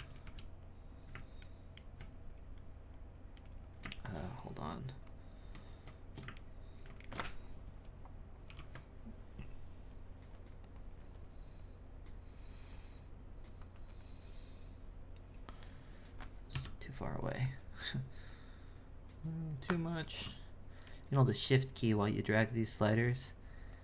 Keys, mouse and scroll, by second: 4.0 ctrl+shift+click, 6.4-8.4 ctrl+middle drag, 8.4 ctrl+i, 10.6-13.7 drag, 16.5 F9.